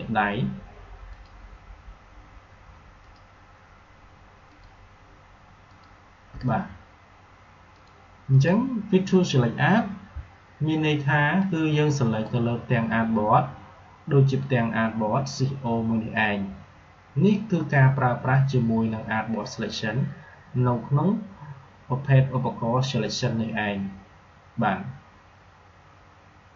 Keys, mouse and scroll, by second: 9.2 click, 11.3-14.7 drag, 26.5 click.